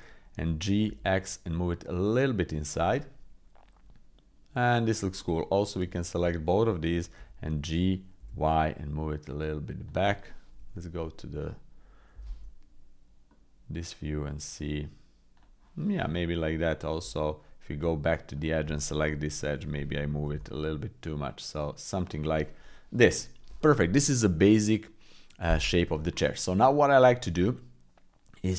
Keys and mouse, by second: 0.3 g, 2.9-4.8 drag, 5.1 middle click, 5.9 shift+click, 7.1 g, 10.5 KP_3, 12.1 g, 16.0 middle click, 17.0 Tab, 19.2 KP_3, 20.3 g, 22.5 click, 22.9 click, 26.5 middle click, 27.5 middle click.